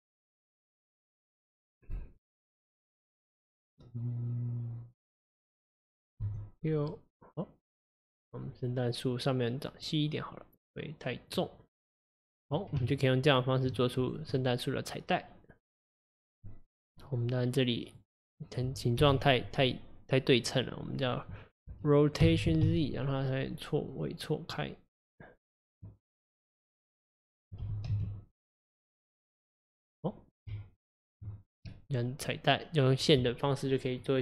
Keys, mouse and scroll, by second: 0.6-2.0 drag, 2.2-5.2 drag, 6.3 s, 8.3 scroll down 2, 9.9-12.1 drag, 12.8 Tab, 14.1 click, 14.4-17.4 middle drag, 17.9 click, 19.0 KP_1, 22.3 r, 26.7 click, 27.7 r, 29.9 click, 30.5 Tab, 31.7-34.2 middle drag.